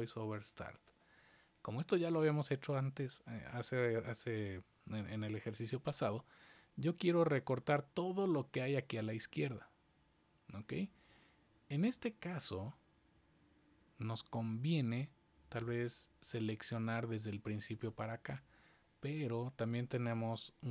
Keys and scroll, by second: 0.0-1.1 typing, 3.5 typing.